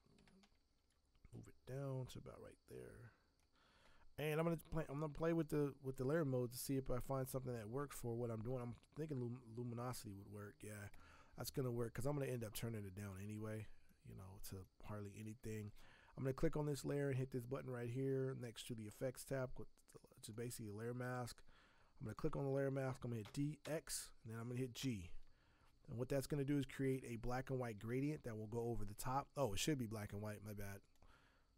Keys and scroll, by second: 23.2 d, 23.6 x, 24.5 g, 24.8 g, 27.9 ctrl+z.